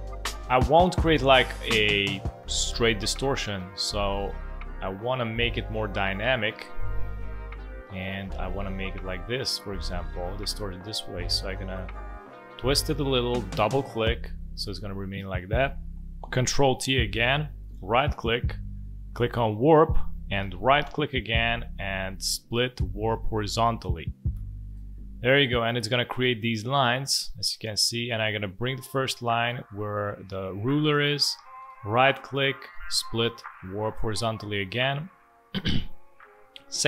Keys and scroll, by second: 16.8 ctrl+t.